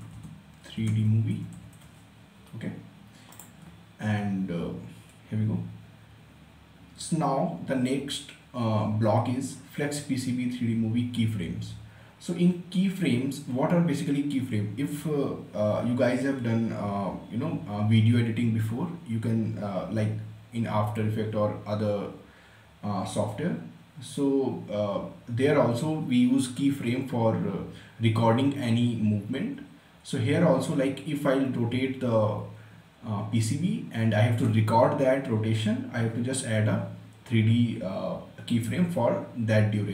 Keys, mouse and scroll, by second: 0.0-2.3 typing, 3.4 click.